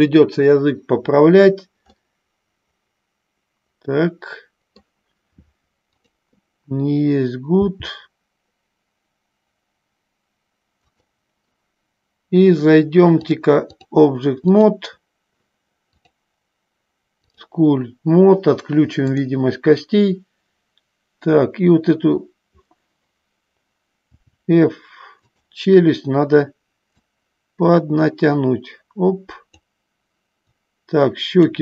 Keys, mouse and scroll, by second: 2.0-5.1 middle drag, 6.1 click, 13.4 click, 14.8 click, 16.2-17.8 drag, 19.3 click, 27.2-29.9 drag, 30.8 click.